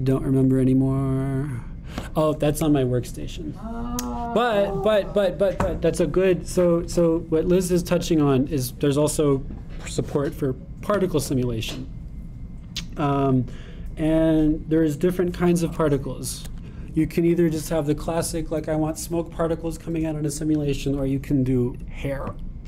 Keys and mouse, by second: 0.0-2.3 drag, 7.1-9.3 drag, 14.0-22.6 drag.